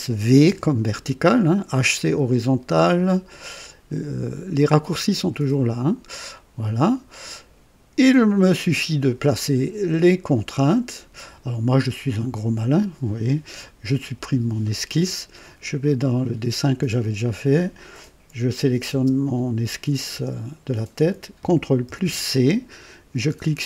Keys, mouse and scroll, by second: 0.4 typing, 6.2-7.0 right drag, 10.4 click, 13.4 click, 14.1 Delete, 15.6 click, 17.2 click, 18.8 space, 20.1 space, 21.8 ctrl+c.